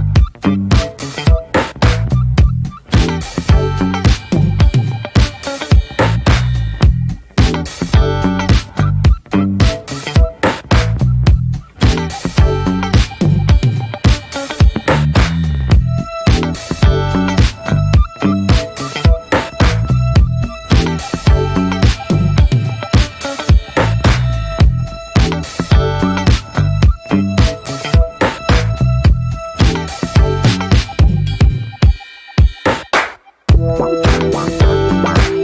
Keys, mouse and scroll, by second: 0.1 middle click, 0.4 /, 0.7-1.1 middle drag, 1.1 Tab, 1.4 middle click, 1.5 scroll up 1, 1.7-2.2 shift+middle drag, 2.2 ctrl+r, 4.1-4.8 middle drag, 4.8 ctrl+r, 7.7-8.1 middle drag, 8.1 scroll up 1, 8.3-10.6 middle drag, 10.6 scroll down 1, 10.7 middle click, 11.2 Tab, 11.7 click, 11.9 ctrl+1, 12.3 ctrl+2, 12.5 scroll down 3, 12.8-13.2 middle drag, 13.2 click, 13.4-13.8 right drag, 13.8-14.8 middle drag, 14.8 click, 15.1 /, 15.9-16.9 shift+middle drag, 16.9 ctrl+s, 17.2 click, 17.9 scroll up 2, 18.2 Tab, 18.4 middle click, 18.5-19.2 scroll up 6, 19.2-19.7 middle drag, 19.7 scroll up 2, 20.0-20.7 shift+middle drag, 20.7 ctrl+r, 22.7-23.3 middle drag, 23.3-23.7 scroll up 1, 23.7 middle click, 24.2-24.9 scroll up 1, 24.9 ctrl+r, 27.0-27.4 middle drag, 27.4 ctrl+r, 28.8 scroll down 1, 28.9-30.1 middle drag, 30.1 ctrl+r, 32.3 ctrl+r, 34.4 scroll down 3, 34.7-35.4 shift+middle drag.